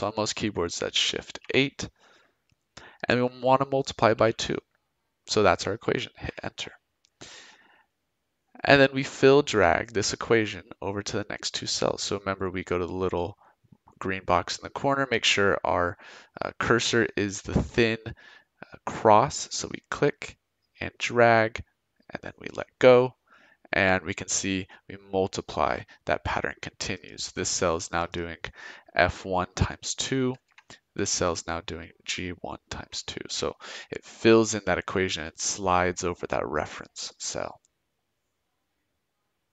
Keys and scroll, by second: 1.2 shift+8, 4.1 2, 6.2 Return, 30.4 Return, 32.7 Return.